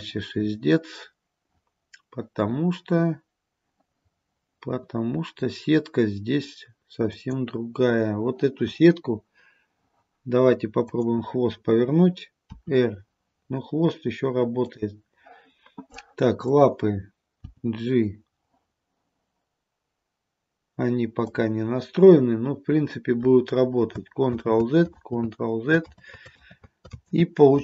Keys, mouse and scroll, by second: 10.9 click, 12.6 r, 16.5 click, 17.8 g, 24.4 ctrl+z, 25.0 ctrl+z, 26.4 ctrl+z, 26.5 ctrl+z, 27.0 ctrl+z.